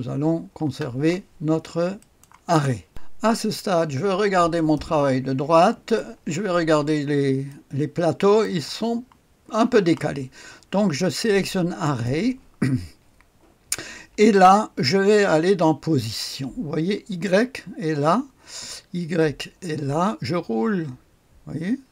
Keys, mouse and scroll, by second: 0.6 space, 2.0 click, 3.4-4.5 scroll up 1, 4.5 click, 5.4-6.0 scroll up 1, 6.0 click, 6.2 right click, 6.2 scroll up 1, 6.9-7.9 scroll up 1, 7.5-8.8 right drag, 11.8 click, 19.2 click, 19.7 click, 20.5-21.9 scroll down 1.